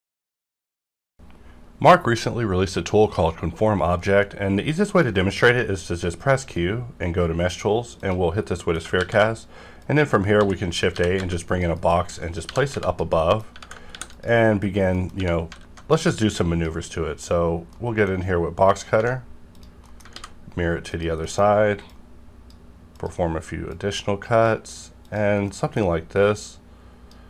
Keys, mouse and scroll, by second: 21.5 scroll up 1, 21.9-25.0 drag, 25.3 scroll down 1, 26.3-27.2 drag.